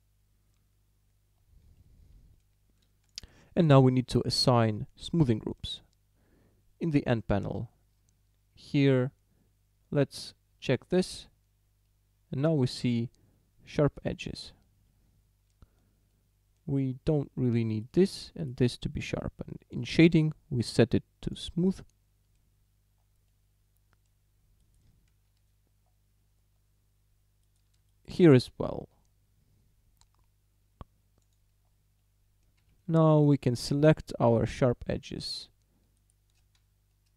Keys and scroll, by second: 25.3 ., 32.6 a.